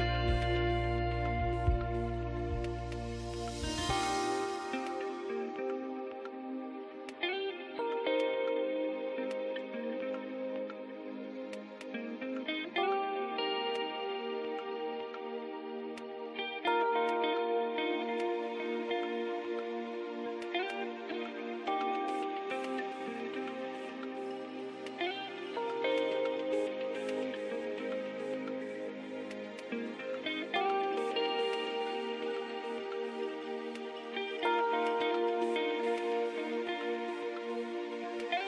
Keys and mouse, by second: 0.5-2.4 drag, 3.5-5.2 middle drag, 5.2-7.5 drag, 8.5 a, 8.7 a, 9.4 w, 12.2 z, 13.1 Tab, 14.9 KP_1, 18.1-19.5 drag, 19.5 Tab, 20.5 z, 21.9 g, 25.3 Tab, 27.5 z, 28.9 ctrl+2, 32.5-34.0 drag, 36.7 Tab.